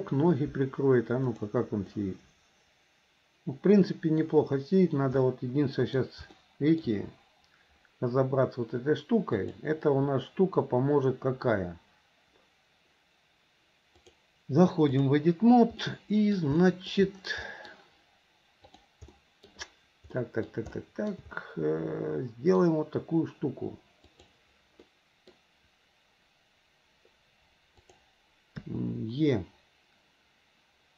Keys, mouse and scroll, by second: 1.3 click, 2.0-4.2 middle drag, 5.3 middle click, 6.4-6.8 shift+middle drag, 9.5-12.4 drag, 14.0-15.2 drag, 15.9 middle click, 16.6 shift+middle click, 17.5 middle click, 18.8 click, 19.2 middle click, 20.2 middle click, 20.8 shift+middle click, 21.4-22.6 middle drag, 24.1 click, 24.9 middle click, 27.8 click, 29.7 e.